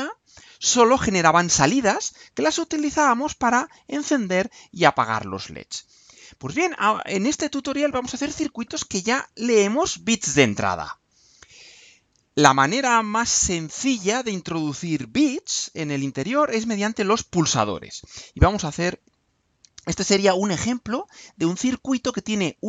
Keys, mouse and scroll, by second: 11.4-11.9 scroll down 2.